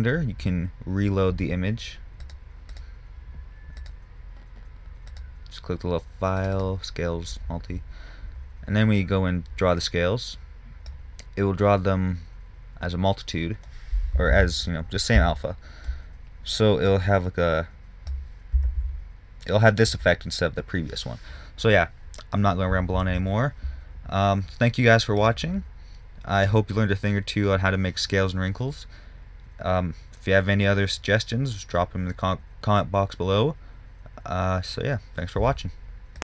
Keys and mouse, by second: 2.7-5.5 drag, 6.9-8.8 drag, 9.3-10.2 drag, 10.2-11.9 middle drag, 11.9 click, 12.0 middle click, 14.8 ctrl+z, 19.1 ctrl+z.